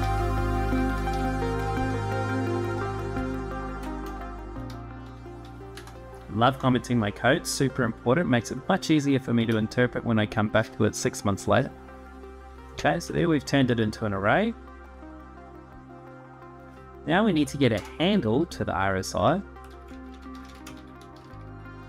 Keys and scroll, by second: 0.0-2.2 typing, 2.9 Return, 3.6 BackSpace, 5.2 y, 5.5 Return, 9.1 Tab, 12.8 Return, 17.1 /, 17.5 space, 19.2-21.8 typing.